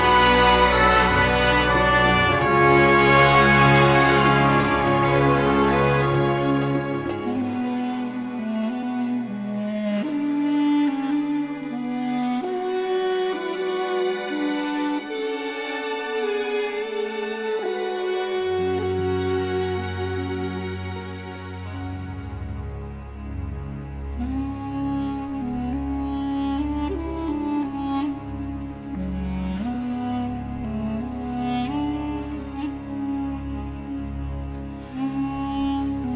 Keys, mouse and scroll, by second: 0.6 click, 2.1 click, 4.0 1, 5.0 click, 6.8 Escape, 9.1-11.4 drag, 12.1 click, 12.6 click, 13.9 click, 16.5 click, 17.8 click, 20.0 click, 21.5-23.2 typing, 24.1 click, 25.4 scroll up 1, 28.3 click, 30.2-30.5 scroll down 1, 30.5-30.9 scroll up 1, 31.8 click, 33.2 scroll down 1, 33.7-34.3 scroll up 3.